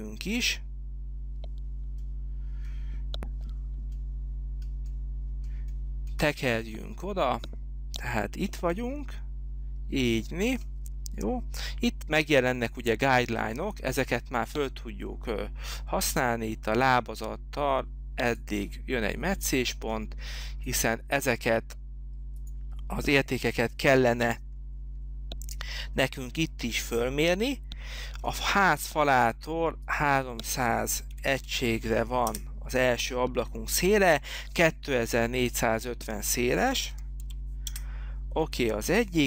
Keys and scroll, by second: 31.0-31.9 typing, 32.5 Return, 36.4-37.9 typing, 38.0 Return.